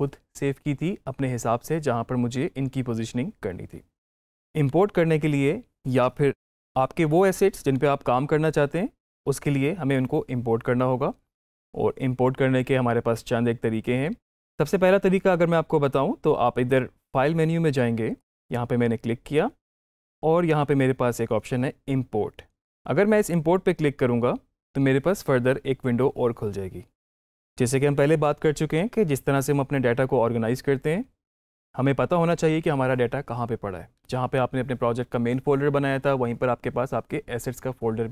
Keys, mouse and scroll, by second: 18.0 click, 18.1 click, 23.1 click.